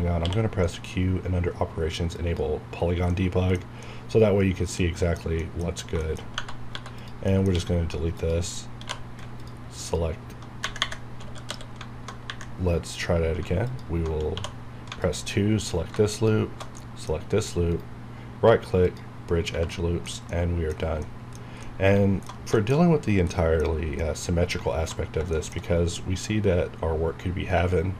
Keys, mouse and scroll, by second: 0.1 q, 2.1 click, 2.8 scroll down 1, 3.1 middle click, 3.5-3.8 scroll down 1, 3.8-5.4 middle drag, 5.6 scroll up 1, 6.0 shift+middle click, 6.2 shift+scroll up 1, 6.4 Tab, 6.7 3, 6.9 click, 7.2 middle click, 7.5 x, 8.1 click, 8.9-9.6 typing, 9.4 alt+click, 11.4 w, 12.8 scroll up 1, 13.3 scroll down 1, 13.6 alt+click, 14.3 2, 15.0 alt+click, 16.7 shift+middle click, 17.1 scroll down 1, 17.6 right click, 18.8 click, 19.3 scroll down 1, 19.5 Tab, 20.0 scroll down 1, 20.3 middle click, 21.3 scroll down 1, 21.6 middle click, 23.6 scroll up 1, 24.0 middle click, 25.0 scroll down 1, 25.3 shift+middle click, 26.8-27.9 scroll down 1.